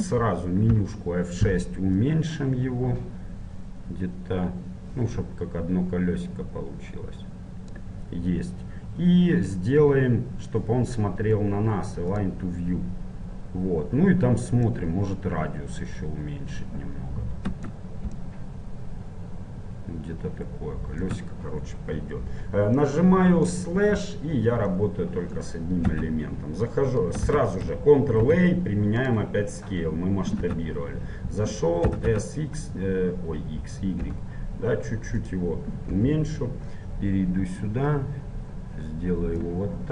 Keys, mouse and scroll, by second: 2.2 F6, 23.0 middle click, 24.0 KP_Divide, 26.0 Tab, 27.4 Tab, 28.3 middle click, 29.2 ctrl+a, 30.7 Tab, 32.0 s, 36.1 KP_7, 36.9 middle click, 37.8-39.5 drag.